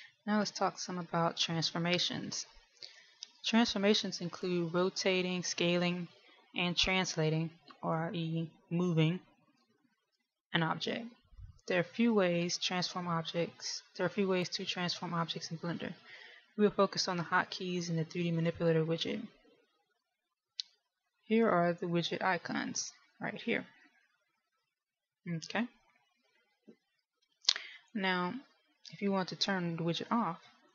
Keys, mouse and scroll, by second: 1.1 shift+middle click.